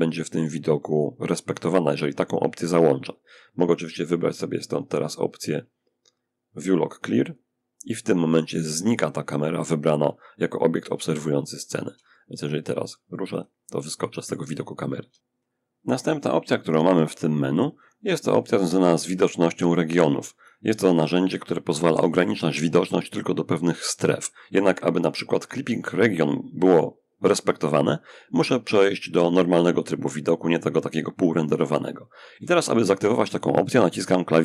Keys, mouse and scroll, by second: 3.4 click, 6.5 click, 10.5-13.8 shift+middle drag, 13.8-14.3 scroll up 2, 14.3 shift+scroll up 1, 14.5 shift+middle click, 16.4 click, 17.1-29.0 scroll up 1, 29.0 click, 30.9-32.2 shift+middle drag, 33.9 alt+b.